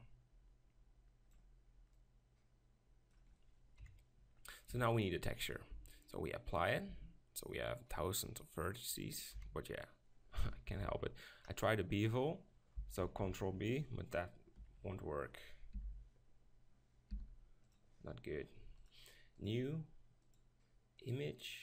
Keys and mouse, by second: 0.1-3.8 drag, 3.8 KP_7, 4.7 Tab, 5.7 Tab, 6.7 click, 6.9 Tab, 9.3 KP_7, 10.6 ctrl+l, 13.0 ctrl+l, 14.6 KP_2, 14.7 KP_2, 15.7 u, 17.1 u, 19.5-21.6 drag.